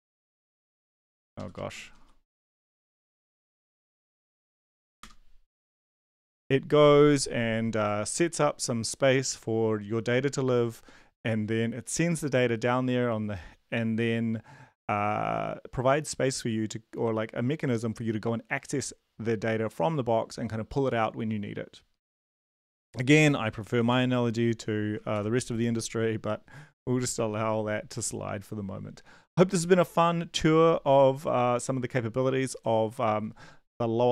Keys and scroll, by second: 1.2 shift+Up, 1.3 shift+Up, 1.5 shift+Right, 2.0 ctrl+/, 2.8 ctrl+s, 3.2 ctrl+`, 4.5 ctrl+l, 4.8 Up, 5.0 Return, 23.9 ctrl+l, 25.1 ctrl+`.